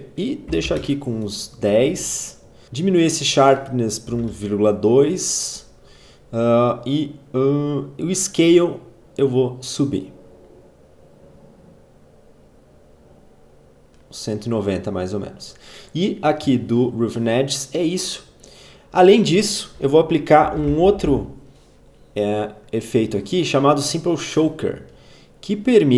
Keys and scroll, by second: 0.1-1.0 typing, 2.6 ctrl+z, 3.8-4.7 typing, 19.7-21.0 typing.